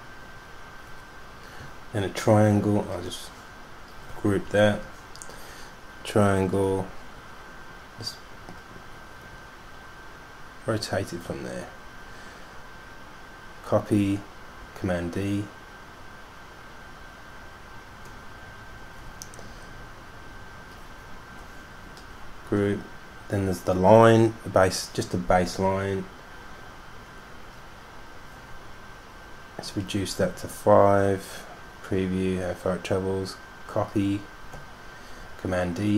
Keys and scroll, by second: 4.6 super+g, 14.8 super+d, 15.3 super+d, 15.5 super+d, 15.6 super+d, 15.8 super+d, 15.8 super+d, 16.3 super+d, 16.6 super+d, 17.5 super+d, 18.1 super+d, 18.5 super+d, 18.7 super+d, 22.6 super+g, 30.6 5, 35.4 super+d, 35.9 super+d.